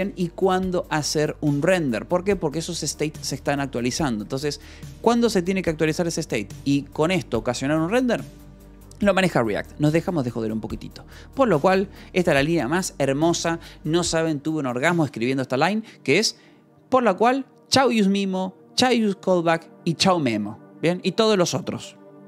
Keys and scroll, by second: 4.7 Escape, 10.4 j, 12.4 shift+v.